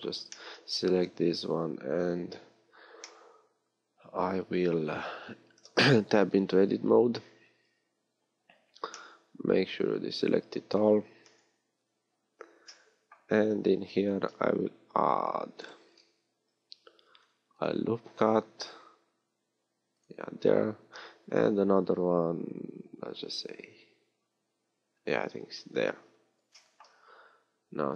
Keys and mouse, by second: 1.1 KP_1, 5.1 middle click, 6.0 Tab, 6.8 a, 7.7 a, 10.6 middle click, 11.5 KP_1, 14.1 ctrl+r, 20.9 ctrl+r.